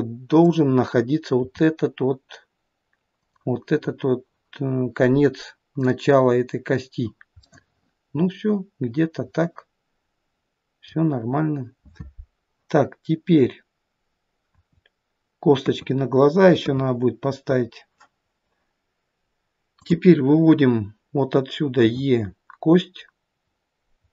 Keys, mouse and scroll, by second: 0.5 click, 1.4 g, 5.8 click, 7.5 middle click, 11.3-14.5 scroll down 3, 14.5 KP_1, 15.6 KP_2, 16.6 KP_3, 17.5-18.6 scroll down 1, 20.6 click, 21.8 e.